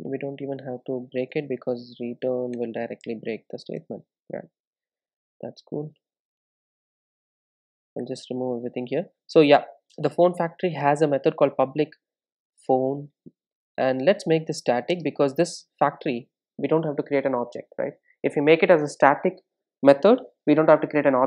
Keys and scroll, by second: 9.2 super+s, 15.9 Return.